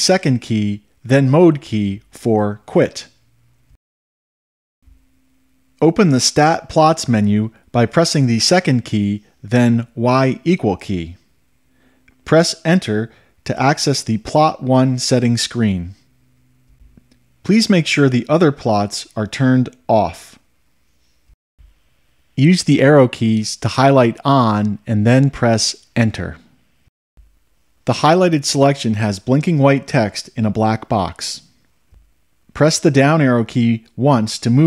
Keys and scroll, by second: 20.5 Return, 24.2 Right, 25.2 Left, 26.9 Return, 34.4 Down.